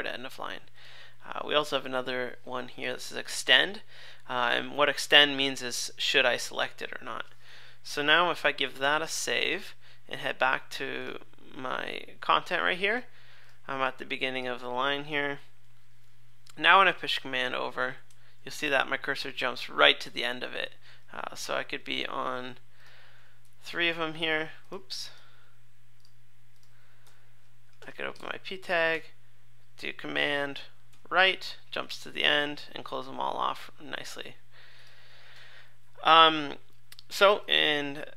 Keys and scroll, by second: 8.8 super+s, 15.3 super+Left, 18.0 super+Right, 23.4 super+Left, 23.7 super+Up, 27.0 super+Left, 30.9 super+Right.